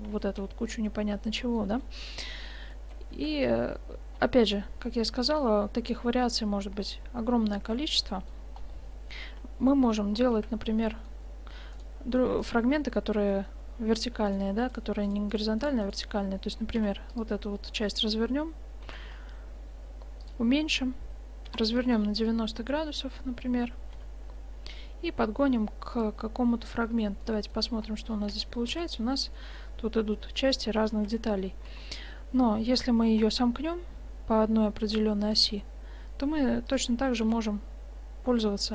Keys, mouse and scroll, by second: 0.3-1.5 middle drag, 1.8 middle click, 1.9-3.1 middle drag, 3.3 shift+z, 7.6-8.6 drag, 9.2 Tab, 10.4 a, 11.1 right click, 11.8-14.1 right drag, 14.3 click, 15.1-16.8 drag, 17.3 u, 17.8-20.1 drag, 18.9 s, 21.5 r, 24.0 g, 26.2-26.6 drag, 27.3 middle click, 28.4 Tab, 28.9 shift+z, 31.1 shift+z, 31.8 Tab, 33.0 s, 35.5 g, 37.3 r.